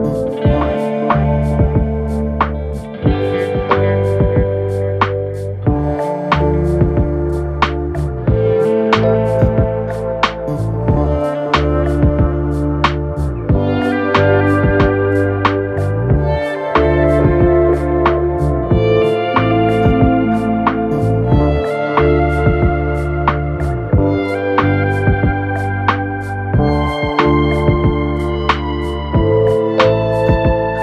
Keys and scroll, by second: 0.8 4, 6.1 ctrl+z, 7.5 3, 9.2 4, 11.6 3, 12.4 Delete, 13.0 Delete, 16.6 ctrl+F1, 20.0 ctrl+F1, 20.7 1.